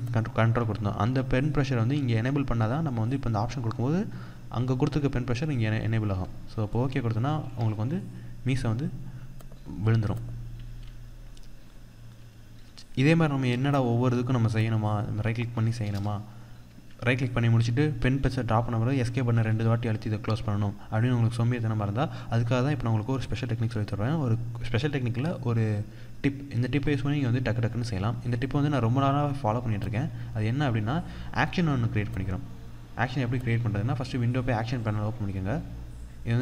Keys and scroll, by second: 7.0 Escape, 18.8 Escape.